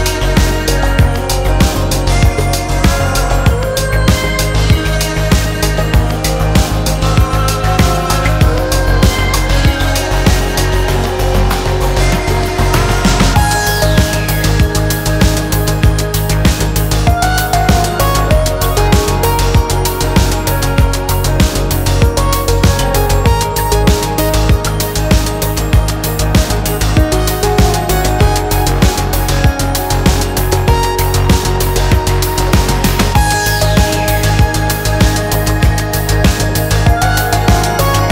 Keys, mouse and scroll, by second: 2.1-3.0 middle drag, 4.0-6.5 drag, 7.1-8.4 middle drag, 8.5-9.0 scroll up 2, 9.0-10.6 middle drag, 11.5-12.7 drag, 13.0-13.6 middle drag, 15.2-16.3 drag, 16.8-17.3 middle drag, 17.5-18.2 scroll down 3, 18.2 middle click, 22.6-23.5 drag, 25.3-26.0 drag, 26.4 click, 27.5-29.0 drag, 30.1-31.5 drag, 32.0-33.6 middle drag, 34.8 click, 36.0-37.0 scroll down 2, 37.0-38.1 drag.